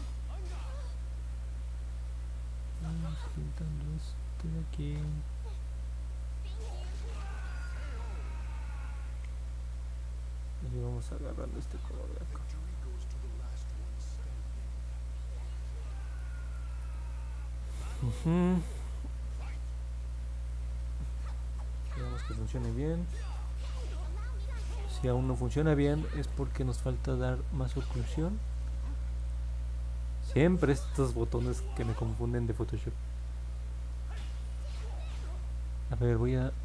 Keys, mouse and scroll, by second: 0.6 click, 0.9 click, 1.2 click, 1.5 click, 1.9 click, 2.2 click, 2.6 click, 3.0 click, 3.4 click, 3.7 click, 4.1 click, 4.4 click, 4.7 click, 5.6 click, 6.1 click, 6.7 click, 7.4 click, 7.9 click, 8.5 click, 10.0 click, 11.0 click, 11.7 click, 12.1 click, 12.8 click, 13.3 click, 13.9 click, 14.6 click, 15.3 click, 15.7 click, 16.0 click, 21.4-21.9 scroll down 2, 22.8-23.4 scroll up 2, 24.0-25.2 alt+drag, 25.5 middle click, 25.9 middle click, 29.1 click, 30.2 click, 33.9 click.